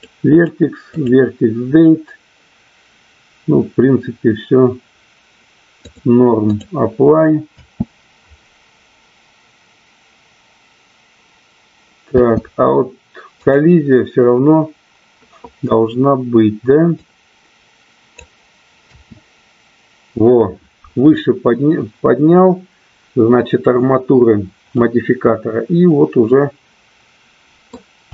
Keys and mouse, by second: 0.2 click, 1.0 click, 5.7-6.7 drag, 7.5 space, 12.8 space, 13.4 click, 16.9-18.0 drag, 18.7 space, 25.1-28.1 middle drag.